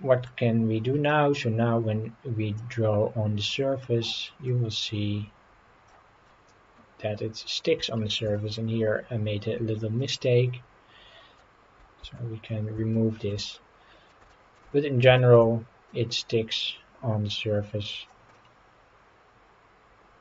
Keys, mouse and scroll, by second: 0.6-1.0 scroll up 3, 2.6-5.9 drag, 6.3-7.6 middle drag, 7.9 shift+middle click, 8.4 middle click, 10.0-11.4 middle drag, 12.1 ctrl+z, 12.9 shift+middle click, 13.5 middle click, 14.3 shift+middle click, 14.8 scroll down 2, 15.2 shift+middle click, 15.9-18.2 drag, 18.4-20.2 middle drag.